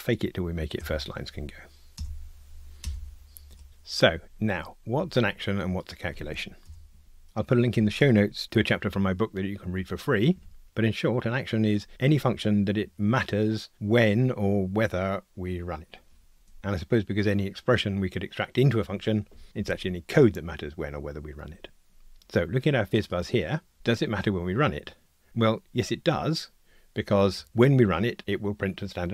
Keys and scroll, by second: 0.8 alt+Return.